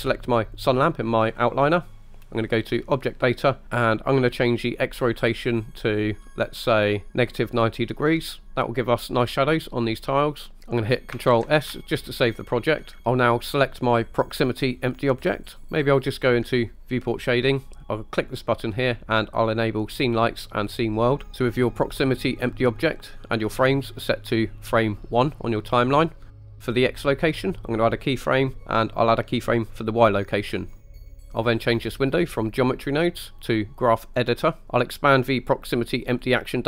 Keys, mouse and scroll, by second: 0.6 click, 3.0 click, 5.1-7.1 drag, 11.5 ctrl+s, 14.6 click, 15.6 right click, 17.2 click, 18.2-21.1 drag, 21.9 click, 24.0 click, 27.8 click, 29.6 click, 32.5-34.3 drag, 36.3 click.